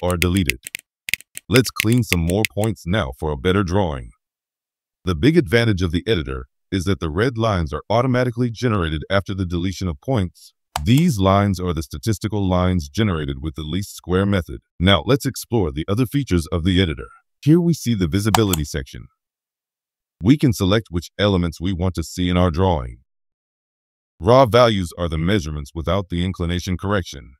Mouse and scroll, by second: 0.2 right click, 0.5 right click, 1.1 right click, 1.5 right click, 1.8 right click, 2.1 right click, 2.4 right click, 7.6-9.2 scroll up 5, 18.3 click.